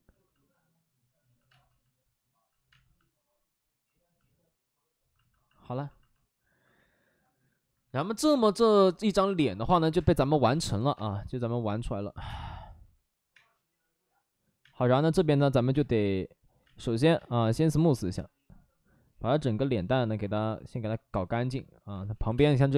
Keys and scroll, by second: 1.4 space, 3.6 space, 9.9 space, 10.4 space, 10.9 space, 12.1 3, 12.2 space, 13.3 space, 14.5 space, 15.7 space, 16.6 space, 20.4-22.7 typing.